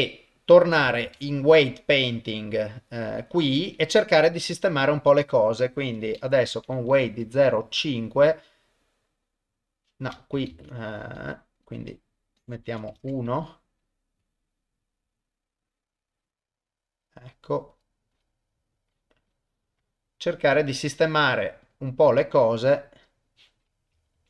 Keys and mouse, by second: 0.5 click, 1.1 ctrl+Tab, 6.0-7.8 drag, 9.2 click, 10.5 ctrl+z, 11.7-13.0 drag, 13.9 click, 14.2 click, 14.5 click, 14.8 click, 15.3 click, 15.7 click, 16.2 click, 17.7 click, 18.2 click, 18.9 click, 19.3 click, 20.3 middle click, 21.7 click, 22.7 click, 24.2 ctrl+z.